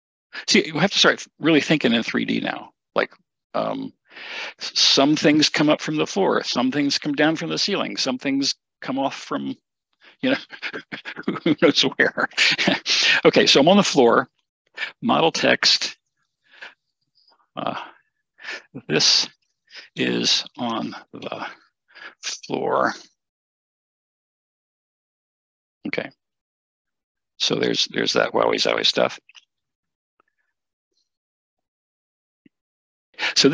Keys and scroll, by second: 19.2-22.1 typing.